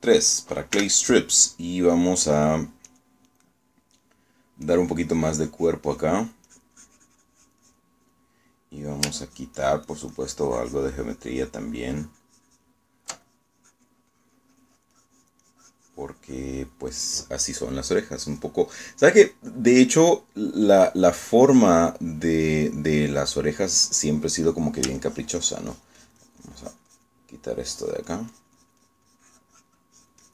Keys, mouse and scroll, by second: 0.8 3, 1.8 f, 4.0 click, 4.6 middle click, 5.8-7.3 drag, 7.6-9.0 drag, 9.1 click, 10.3-13.9 ctrl+drag, 14.4-17.6 ctrl+drag, 22.0-23.2 middle drag, 26.1-28.3 ctrl+drag, 28.9-30.3 ctrl+drag.